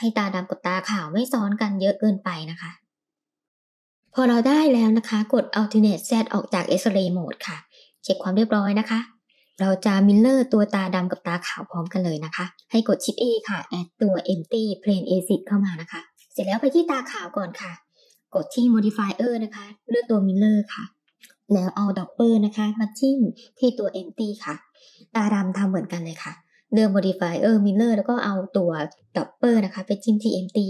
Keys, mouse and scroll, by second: 0.9 g, 2.1 r, 3.4 middle click, 3.4 click, 4.2 alt+z, 4.8-7.3 middle drag, 12.6 shift+a, 16.2 click, 16.8-17.9 drag, 18.3-19.8 drag, 21.8 click, 24.3 click, 25.1-27.1 drag, 29.0 click.